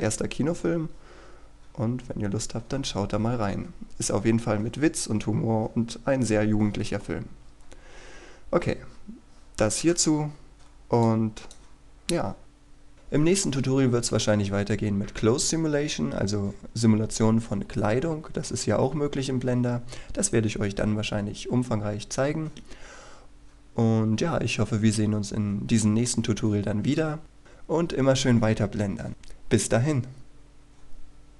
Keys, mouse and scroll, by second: 10.9 click.